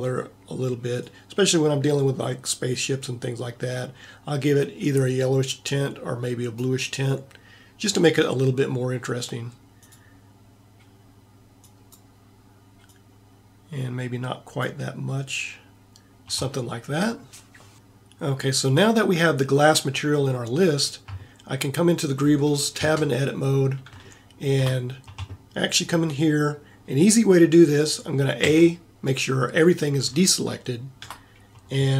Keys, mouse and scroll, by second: 23.0 Tab, 23.6 middle click, 28.6 a, 30.7 middle click.